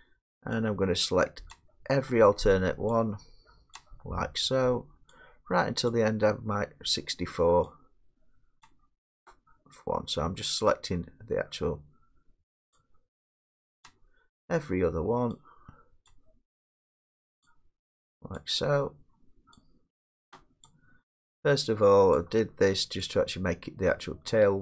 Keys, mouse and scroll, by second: 1.5-3.9 shift+drag, 5.2 shift+click, 7.7-22.8 shift+drag.